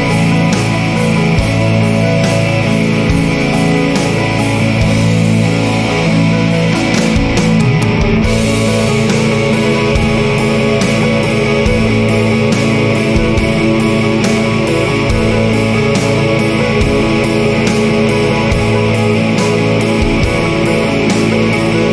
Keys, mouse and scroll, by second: 1.1 click, 2.3 scroll up 2, 4.3 click, 5.0-5.5 scroll down 2, 5.8-6.4 scroll up 2, 7.5 scroll up 2, 9.3 click, 10.2 scroll up 1, 12.4 click, 13.7 scroll up 2, 14.9-15.5 scroll down 2, 15.7-16.3 scroll up 2, 17.6 click, 19.4 scroll up 2, 21.5 click.